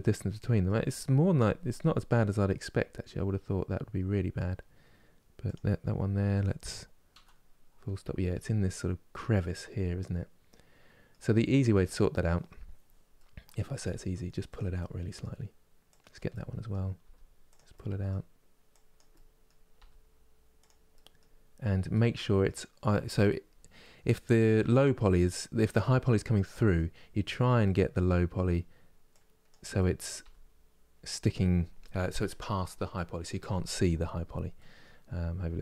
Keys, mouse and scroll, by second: 5.2 click, 6.8 KP_Decimal, 7.6-8.5 scroll down 8, 8.8-13.5 middle drag, 13.5 g, 14.4-15.7 middle drag, 15.7 click, 16.0 middle click, 16.7 g, 17.4-18.6 middle drag, 18.6 click, 18.8 middle click, 19.5 g, 20.6 middle click, 21.1 scroll down 2, 21.6-22.9 middle drag, 22.9 scroll down 4, 23.4-26.7 middle drag, 26.7 scroll up 3, 27.3-29.1 middle drag, 29.1 click, 29.4-33.8 middle drag, 33.8-34.2 scroll down 2, 34.2 middle click, 34.7 scroll down 2, 35.2-35.6 middle drag.